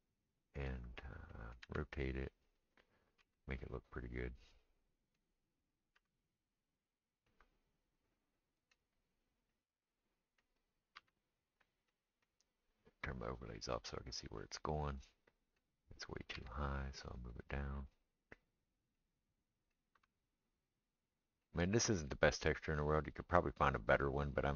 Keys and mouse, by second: 1.7 r, 3.2 g, 5.9 r, 10.9 g, 13.5 click, 13.7-24.5 middle drag, 16.3 g, 19.9 g.